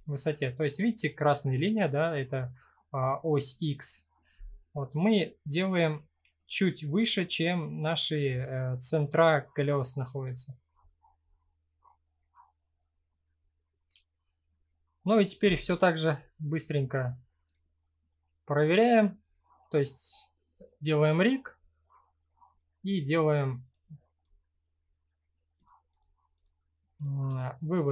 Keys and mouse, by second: 11.4-12.2 middle drag, 12.6-14.2 middle drag, 17.0 click, 21.2-22.0 middle drag, 23.5 click, 25.1 click, 25.5-26.0 drag, 27.1-27.4 drag.